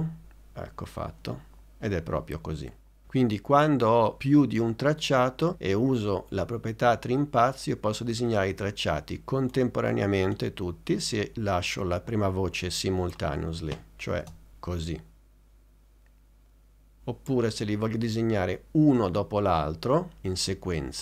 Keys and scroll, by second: 14.3 space.